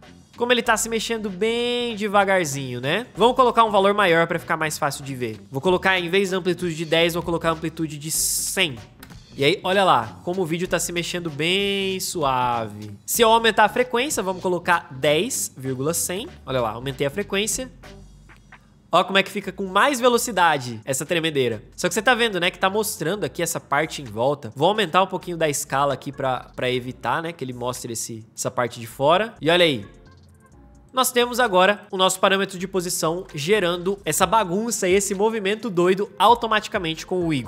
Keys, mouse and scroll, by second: 9.3 space, 17.3 space, 24.7 s, 28.3 space, 31.8 p, 33.1 space.